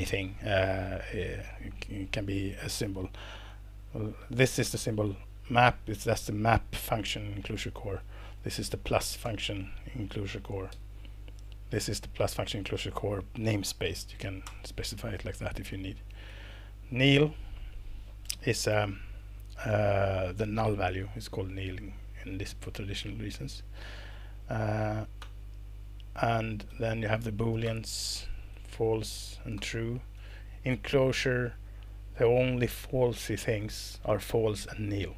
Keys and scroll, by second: 4.8 alt+Return, 7.4 Escape, 8.1 Down, 9.2 alt+Return, 10.1 Escape, 10.7 Down, 14.4 alt+Return, 15.6 Escape, 16.3 Down, 24.1 Page_Down, 24.9 Page_Up, 25.2 alt+Return, 25.9 Up, 26.2 Page_Down, 26.4 Page_Down, 26.7 Left, 27.6 alt+Return, 28.5 Left, 28.7 Left, 28.8 Left, 29.1 Left, 29.5 alt+Return, 30.1 Escape, 30.7 Right, 30.9 Right, 31.1 Right, 31.3 Right, 31.8 Right, 32.1 Right.